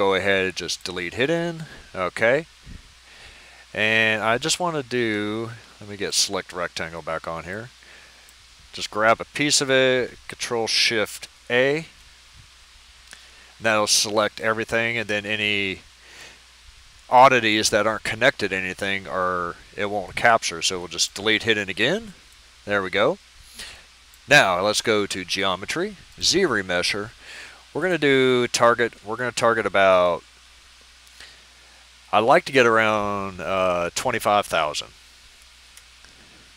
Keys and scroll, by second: 11.5 ctrl+shift+a, 34.4-34.9 typing, 35.7 Return.